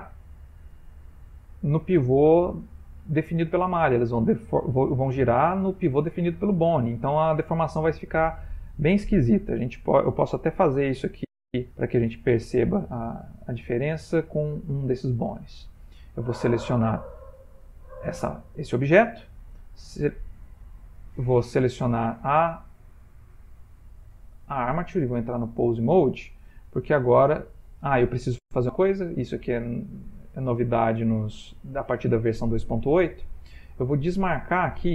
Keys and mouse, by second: 0.4 middle click, 8.3 middle click, 10.4 click, 11.7 ctrl+middle click, 12.3 shift+middle click, 13.3 ctrl+middle click, 14.4 Tab, 15.2 click, 17.4 g, 21.1 click, 24.5 click, 26.9 click, 29.5 click.